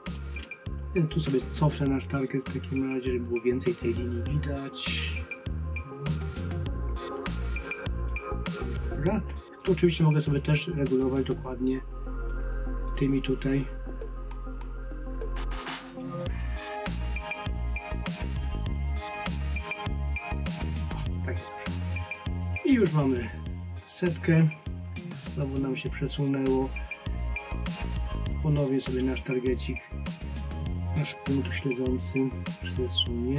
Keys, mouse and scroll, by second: 9.7 click, 12.9 click, 16.5 click, 23.0 click, 29.2 click.